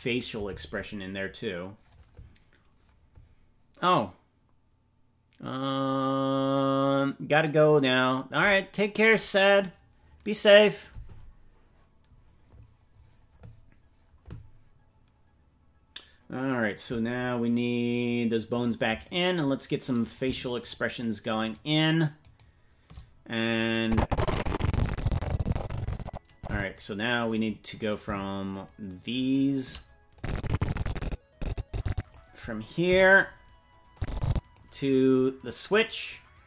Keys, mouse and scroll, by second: 18.5 click, 20.1 right click, 23.5 shift+right click, 23.8-26.7 drag, 28.0 right click, 29.3 shift+right click, 30.1-32.1 drag, 32.8 i, 33.9 click, 35.6-36.4 drag.